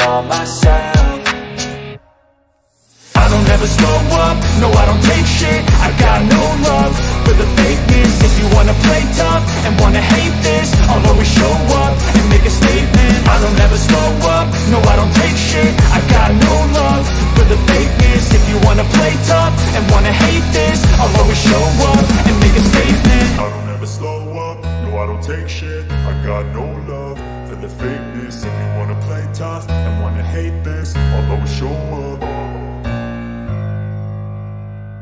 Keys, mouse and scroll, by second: 2.1 ctrl+click, 5.6 ctrl+p, 12.5 click, 16.6-20.0 drag, 21.0 click, 22.8 click, 26.0 click, 28.1 click, 31.1 click, 32.1-34.4 drag.